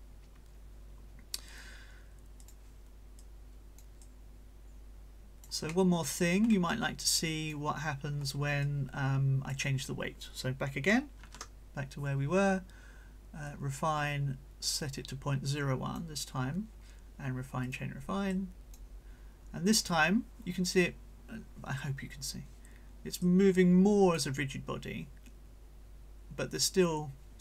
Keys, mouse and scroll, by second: 2.4 click, 3.2-5.6 drag, 6.6-7.7 drag, 7.8-8.4 scroll up 4, 8.6-9.7 drag, 11.2 ctrl+z, 13.5-16.1 drag, 17.6 click, 18.3 click, 23.2-24.4 drag.